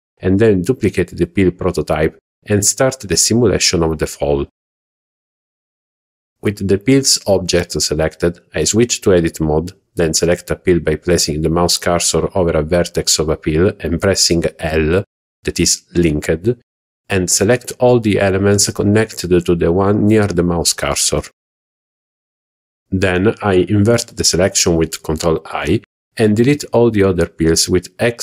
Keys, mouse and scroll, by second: 7.1 Tab, 8.3 click, 8.8 alt+a, 10.9-11.3 scroll up 2, 15.7 l, 20.6 ctrl+i, 21.7 s, 22.4 click, 22.6 x, 26.4 a.